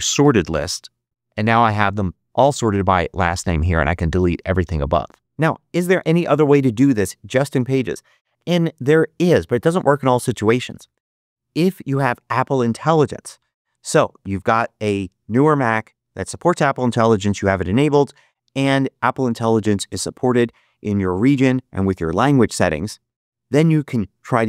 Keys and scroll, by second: 0.1 Return, 0.4 super+v.